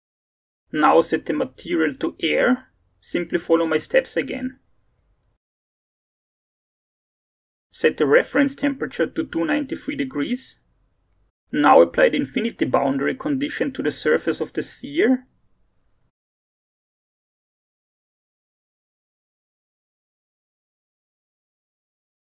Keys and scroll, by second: 9.3-10.3 typing, 16.2-19.0 typing.